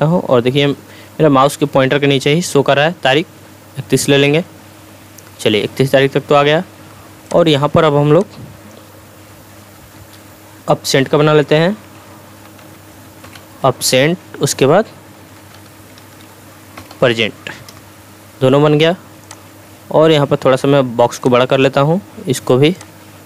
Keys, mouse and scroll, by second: 7.3-8.8 drag, 11.3-13.3 typing, 13.8 Tab, 14.9-17.4 typing, 17.7 Return, 19.2-21.8 drag, 22.8-23.2 drag.